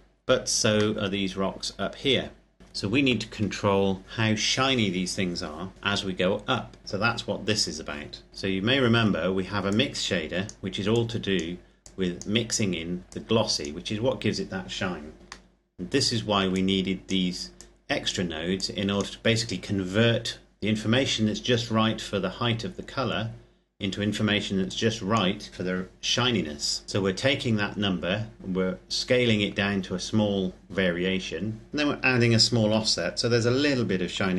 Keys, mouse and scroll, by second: 0.0-0.6 scroll up 1, 0.8 shift+middle click, 2.6 scroll down 1, 5.7 ctrl+Num_Lock, 5.7 scroll down 1, 5.7 click, 6.4-6.8 scroll down 1, 6.8 middle click, 9.5 click, 15.3 middle click, 16.3 click, 21.9-23.1 scroll down 1, 23.1-24.4 scroll up 1, 24.4 click, 29.5-31.4 scroll up 2.